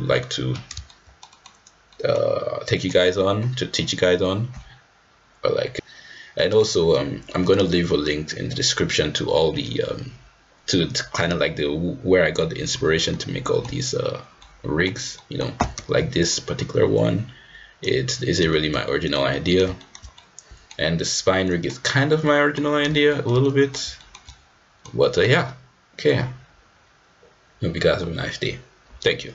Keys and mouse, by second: 0.2 middle drag, 0.5 click, 0.9-1.2 shift+middle drag, 1.3 middle drag, 1.9 middle click, 2.7 middle drag, 6.4 middle click, 13.1-13.6 middle drag, 14.4-14.9 middle drag, 15.2 middle click, 16.2-17.3 drag, 17.9-18.7 drag, 18.7 ctrl+z, 18.9 middle drag, 19.3 drag, 19.5 middle click, 19.8 shift+middle drag, 19.8 shift+click, 20.2 drag, 20.4-20.7 middle drag, 21.5 middle click, 22.3-22.6 middle drag, 23.1 shift+middle drag, 23.5 middle drag, 24.0 shift+middle drag, 24.3-24.8 middle drag, 24.8 click, 25.0 click, 25.1 middle click.